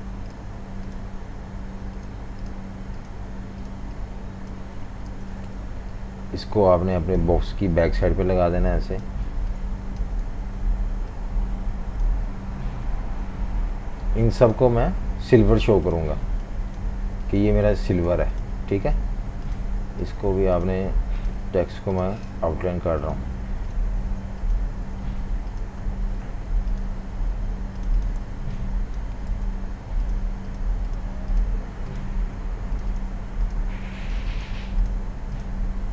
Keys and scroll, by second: 5.1 super+g, 9.3-10.9 typing, 18.1 v, 24.1 super+3, 24.8 super+3, 25.8 super+3, 26.4 alt+super+3, 28.2-29.3 typing.